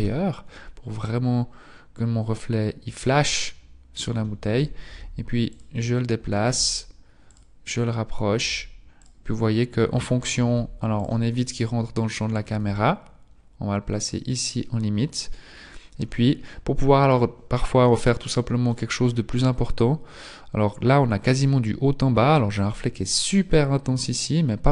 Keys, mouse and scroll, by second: 1.1-1.9 scroll up 5, 2.9-3.4 scroll up 1, 3.4-4.9 scroll down 2, 4.9 scroll down 1, 4.9 g, 6.4 g, 8.5 g, 10.4 g, 11.3-11.9 scroll down 3, 11.9 scroll up 1, 12.5 g, 16.1-17.2 scroll down 1, 17.9 middle click, 20.0 middle click, 22.3-24.7 scroll up 2.